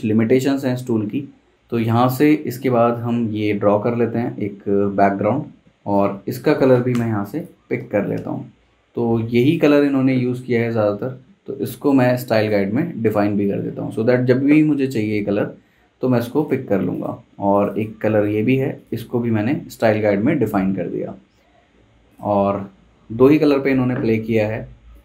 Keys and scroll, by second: 5.6 v, 6.9 i, 8.1 v.